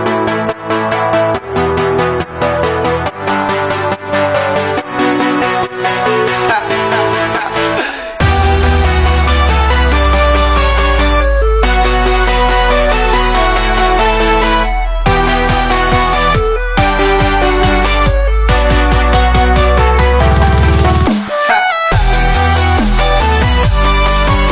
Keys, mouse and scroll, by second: 0.0 middle click, 0.5-0.8 scroll down 2, 0.8 click, 1.4-1.8 middle drag, 1.8-2.3 scroll up 3, 2.3 click, 3.1-3.7 scroll down 5, 3.2-3.7 middle drag, 3.7 click, 6.5 click, 7.7-9.0 drag, 10.8-11.3 scroll down 1, 11.3 shift+middle click, 11.5 scroll up 1, 11.6 scroll down 1, 11.6 scroll up 1, 11.7-12.6 scroll down 6, 12.0 middle click, 12.3 middle drag, 12.6-13.0 shift+middle drag, 13.0 shift+a, 15.2 click, 16.5-17.7 drag, 17.7-18.2 scroll up 1, 18.2 click, 19.2 click, 21.2-23.9 drag, 23.9 KP_0, 24.0 KP_0.